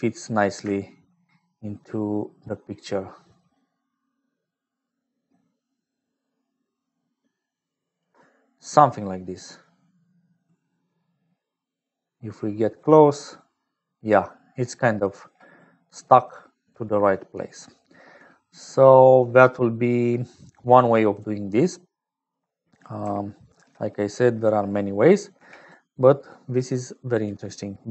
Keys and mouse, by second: 1.5-8.1 shift+drag, 8.7-10.4 drag, 11.6-14.0 drag, 14.0 middle click, 15.8 click, 19.0 click, 20.9 middle click, 21.5 click, 23.5 ctrl+j, 25.3 g, 26.5 click.